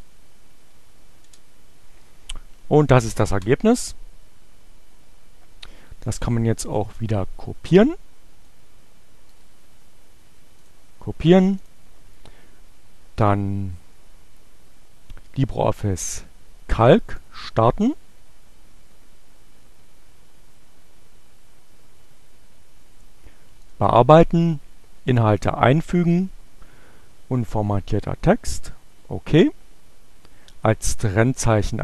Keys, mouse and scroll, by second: 0.1 Up, 1.0 Return, 5.4-8.6 drag, 8.9 right click, 10.1 click, 11.6 click, 16.3-17.3 drag, 23.2 click, 25.0 click, 28.0 click, 31.5 click.